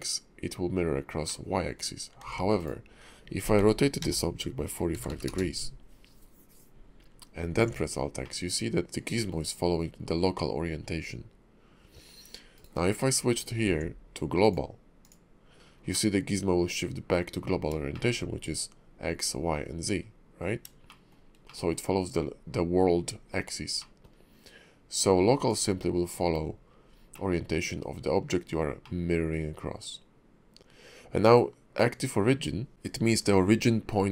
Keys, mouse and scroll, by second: 1.3 middle click, 3.5 r, 7.6 alt+x, 8.2 middle click, 13.6 alt+x, 14.4 click, 15.9 middle click, 17.4-17.8 scroll down 3, 17.9 shift+middle click, 20.9 shift+middle click, 21.4 middle click, 23.8 middle click, 24.9 click, 27.1 middle click, 27.8 scroll up 3, 28.8 middle click.